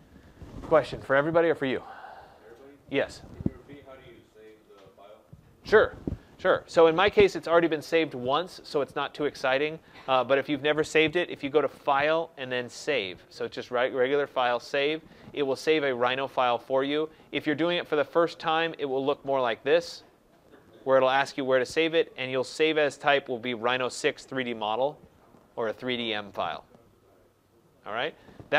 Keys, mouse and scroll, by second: 11.7 click, 14.8 click, 17.5 click, 19.0 click, 21.0 click.